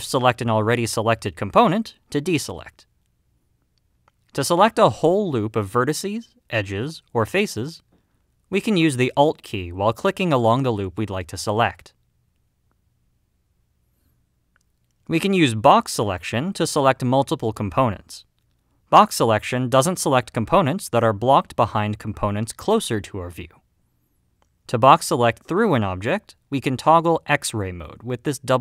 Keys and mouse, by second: 7.6 click, 12.5-15.4 middle drag, 17.4 click, 18.8-19.8 drag, 21.0-22.8 middle drag, 23.7-26.6 middle drag.